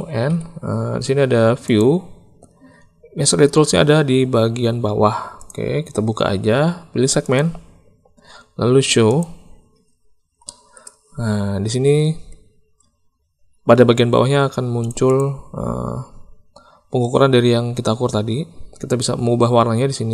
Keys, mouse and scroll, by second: 0.2 n, 5.3 click, 7.3 click, 9.0 click, 10.4 shift+click, 14.8 click, 15.0 click, 18.8 click.